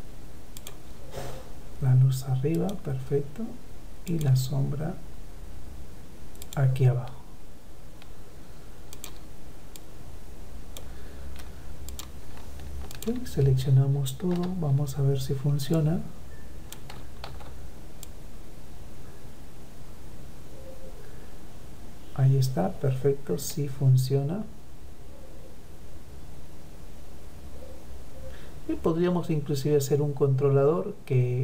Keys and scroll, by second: 16.2 ctrl+z.